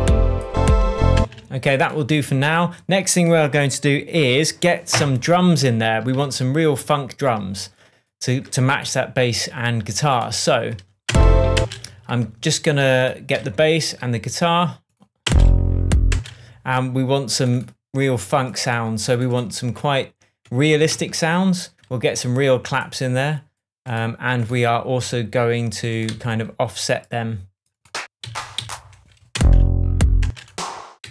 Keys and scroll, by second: 1.1 space, 6.1 super+s, 11.0 super+space, 15.2 space, 20.9 shift+Tab, 26.0 Right, 28.2 Up, 29.3 space, 31.0 Down.